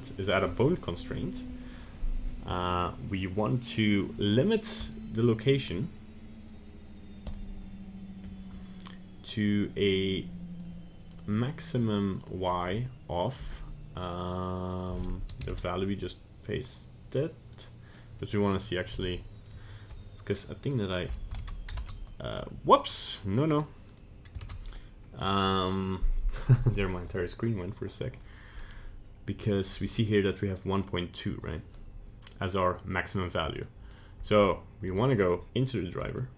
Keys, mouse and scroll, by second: 0.0 click, 0.3 click, 3.5 click, 10.7 click, 11.2 click, 12.2 click, 18.0 right click, 18.5 right click, 18.9 g, 20.4 click, 20.7 click, 23.9 right click, 24.4 ctrl+Tab, 24.8 right click, 29.5 click, 33.6 right click, 33.9 right click, 34.9 right click, 35.2 right click, 35.9 right click.